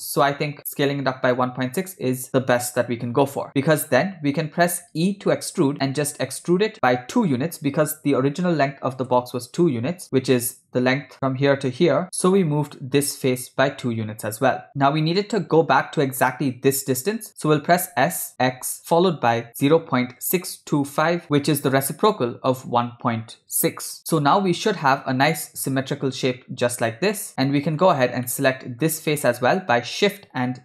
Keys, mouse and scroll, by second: 4.0 shift+middle click, 5.1 e, 11.1 click, 14.7 Tab, 17.8 s, 24.4-27.9 middle drag, 28.3 middle click.